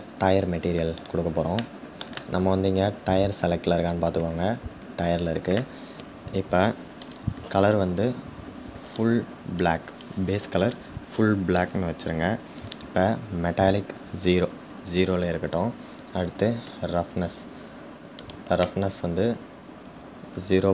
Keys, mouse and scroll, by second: 0.6 click, 1.2-8.5 shift+middle drag, 8.5 click.